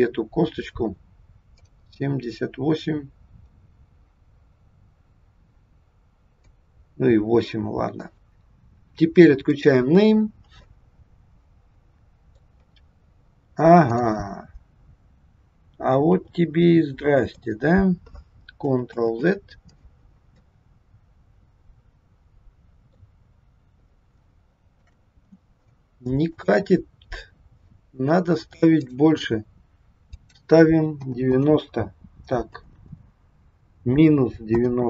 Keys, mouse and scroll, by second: 1.6 click, 7.2-7.8 scroll down 3, 8.3 click, 8.3 KP_1, 9.4 click, 10.3-10.6 scroll down 1, 10.6 middle click, 12.5-13.4 scroll up 2, 13.8 click, 16.0 g, 19.0 ctrl+z, 20.4 middle click, 23.7-24.0 scroll up 2, 24.1 shift+middle click, 26.3 click, 28.8 click, 30.0 click, 32.6 BackSpace.